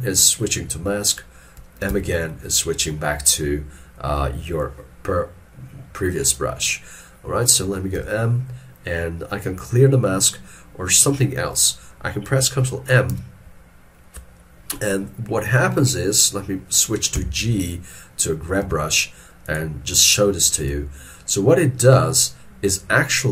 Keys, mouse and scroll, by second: 8.0 m, 13.2 ctrl+m, 17.2 g.